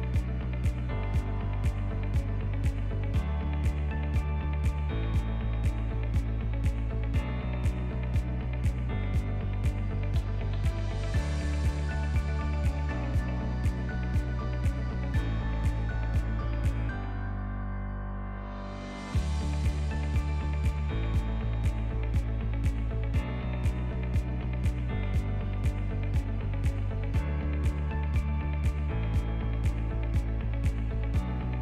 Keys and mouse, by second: 1.2 i, 3.3 ctrl+middle click, 3.7 e, 5.5 KP_1, 6.3 shift+middle click, 7.5-9.3 drag, 9.5 s, 11.6 ctrl+r, 12.7 s, 13.9 Tab, 14.4-15.0 middle drag, 15.5 ctrl+2, 16.7 shift+middle click, 17.3 Tab, 18.0 3, 18.3 click, 19.2 i, 20.5 i, 22.1 Tab, 22.5 ctrl+middle click, 23.7 Tab, 24.1 ctrl+r, 27.9 1, 28.2 click, 29.1 alt+z, 29.3 click, 30.5 alt+z, 30.9 middle click, 31.5 s.